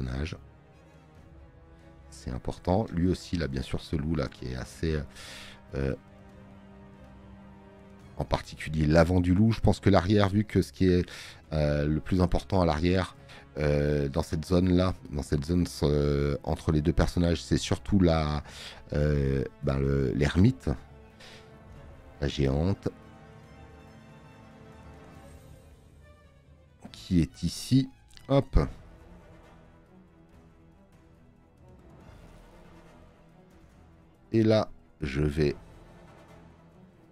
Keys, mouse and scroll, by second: 4.2 space, 4.4 click, 11.8 space, 12.7 click, 26.4 space, 26.5 click.